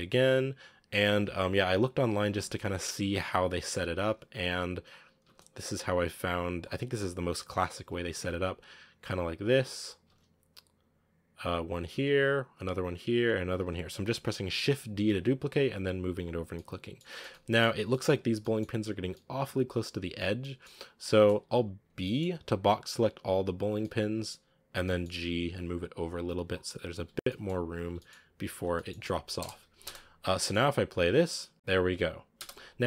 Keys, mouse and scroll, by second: 0.8 scroll down 2, 2.2 shift+d, 3.9 right click, 4.0 g, 5.2 shift+d, 7.0 right click, 7.2 g, 8.1 shift+d, 10.0 shift+d, 11.8 shift+d, 13.5 shift+d, 16.4 scroll down 1, 16.4-18.0 middle drag, 18.0-18.4 scroll up 5, 18.4 middle click, 19.0 scroll up 1, 19.2 middle click, 20.1 scroll down 5, 20.3 middle click, 20.9 a, 21.9 middle click, 22.2 n, 23.4 click, 23.7-24.7 middle drag, 24.7 g, 26.9 n, 27.0 scroll down 1, 27.1 middle click, 27.6 a, 27.8-29.2 middle drag, 29.2 KP_0, 29.7 space, 30.2-32.2 shift+middle drag, 32.2 space, 32.6 click.